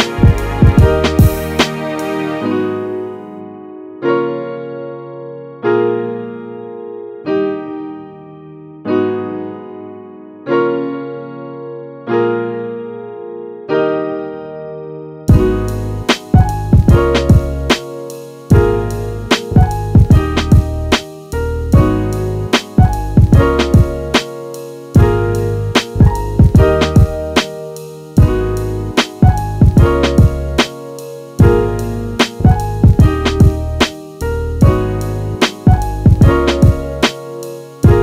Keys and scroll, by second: 3.8 t, 4.6 t, 10.1 space, 31.4 space.